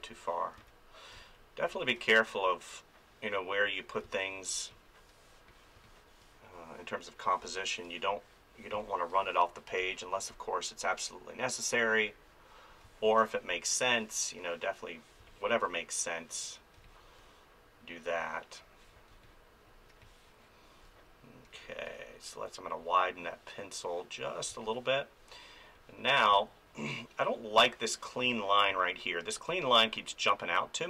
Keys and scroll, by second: 1.1 space, 4.0 space, 5.7 space, 7.4 space, 12.8 space, 15.2 space, 16.9 space, 18.9 space, 22.3 [, 24.5 space, 26.3 space, 28.2 ctrl+z, 29.5 space.